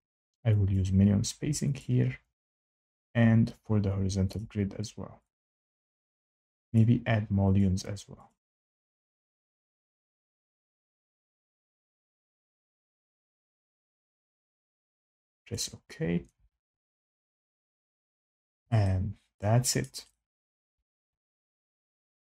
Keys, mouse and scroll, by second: 0.7 click, 1.7 click, 3.0 click, 4.3 click, 5.3 click, 5.8 scroll down 2, 6.7 click, 7.5 click, 8.2 click, 9.2 click, 9.2 scroll, 9.3 scroll down 2, 10.0 click, 10.6 click, 11.4 click, 12.0 click, 12.6 click, 13.2 click, 13.9 click, 14.5 click, 15.4 click, 18.2 click, 19.7 shift+right click, 20.6 F8, 20.6 click, 20.6 scroll, 21.1 click, 22.0 click.